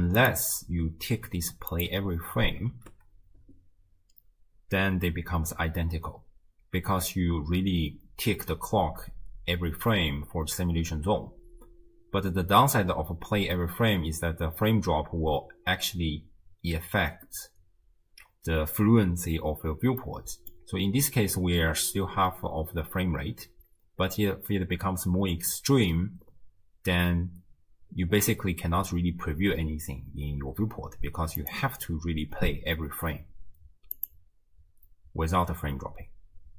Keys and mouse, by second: 2.9 shift+space, 3.5 space, 11.7 space, 12.6 space, 18.0 space, 20.0 click, 21.3 space, 23.7 space, 31.4-36.5 drag.